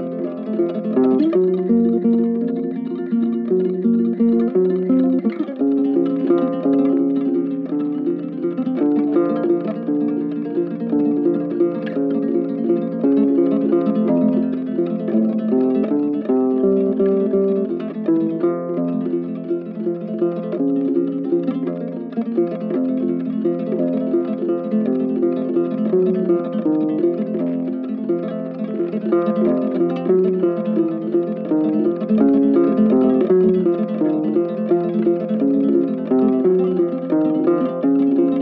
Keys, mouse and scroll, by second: 2.5 double click, 17.6 ctrl+z, 17.7 typing, 21.4 typing, 22.8 typing, 24.4 typing, 30.0 double click.